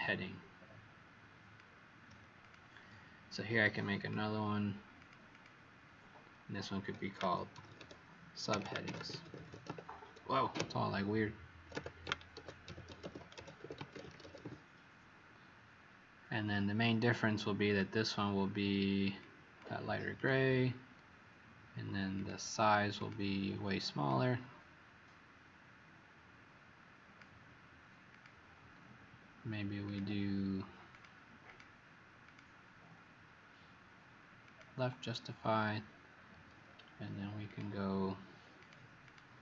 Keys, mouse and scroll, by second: 2.4 click, 3.9 click, 5.3 click, 6.9-11.7 typing, 11.7 Caps_Lock, 12.8-14.1 typing, 17.6 click, 39.0 click.